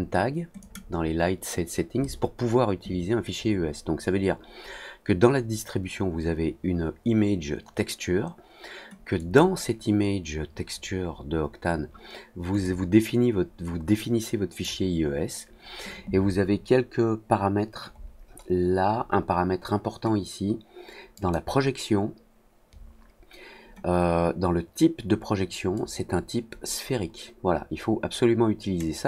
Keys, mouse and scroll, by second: 0.5 click, 9.1 click, 12.6-14.6 drag, 17.9 middle click, 21.1 click, 25.7-28.7 drag.